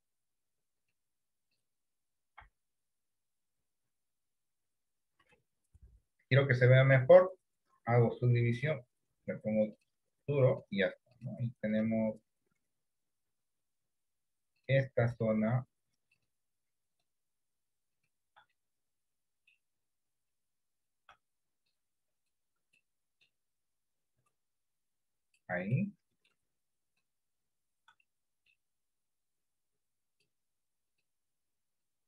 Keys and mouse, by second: 2.5 KP_1, 2.8 KP_3, 8.7 click, 13.4 Tab, 18.6 middle click, 22.8 middle click, 24.1-25.4 drag, 25.9 middle click, 28.1 middle click, 29.3-30.3 drag.